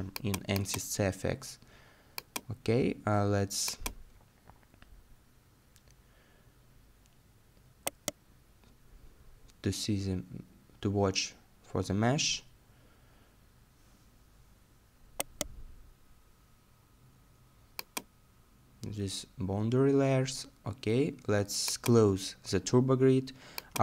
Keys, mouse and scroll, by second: 4.5 middle click, 7.3-7.9 scroll down 1, 7.9 right click, 8.9-12.7 scroll down 1, 14.4 middle click.